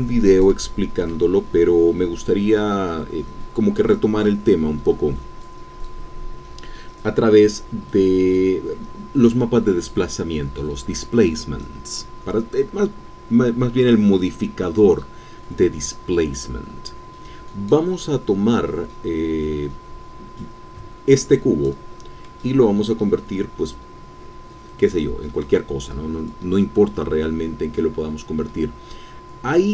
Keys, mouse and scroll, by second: 22.5-23.0 scroll up 1, 23.0-25.0 scroll down 1, 25.0-25.7 scroll down 1, 25.7-29.7 scroll down 1.